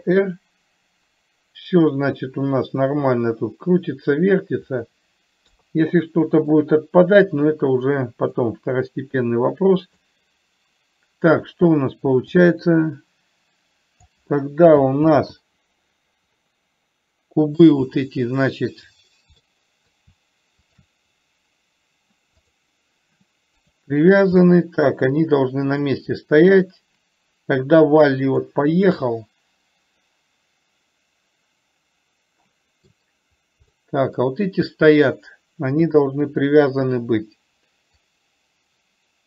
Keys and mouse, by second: 0.4 r, 5.9 KP_3, 8.6-10.4 drag, 12.6-14.5 drag, 15.4 ctrl+z, 16.8-17.9 middle drag, 19.8 middle click, 21.0 shift+click, 22.9 click, 24.0 click, 24.6 middle click, 26.4-28.8 drag, 29.4-33.3 middle drag, 34.1 middle click, 36.1 KP_7, 38.4-39.2 drag.